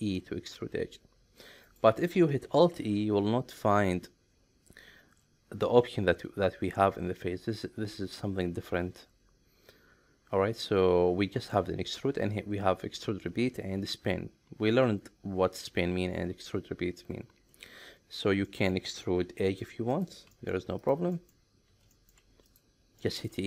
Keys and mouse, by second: 0.1 e, 1.7 right click, 2.6 alt+e, 18.4 middle click, 19.3 e, 19.4 middle click, 19.9 click, 20.2 e, 20.3 middle click, 20.8 click, 21.1 middle click, 21.7 e, 21.9 middle click, 22.5 click, 23.0 middle click.